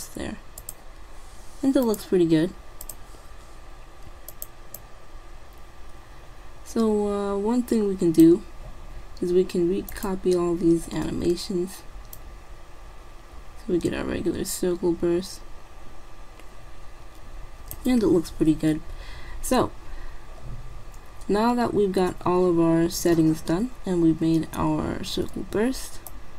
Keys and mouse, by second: 10.0-11.7 drag, 12.2-13.9 drag, 23.4-25.7 middle drag, 26.2-26.3 drag.